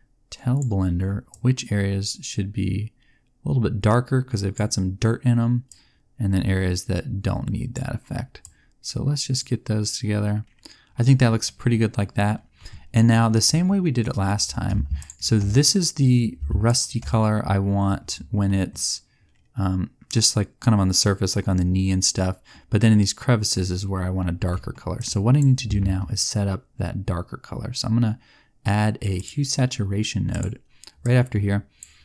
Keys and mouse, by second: 5.6 click, 14.9-16.6 drag, 24.9 click, 25.7 shift+a, 31.1 click.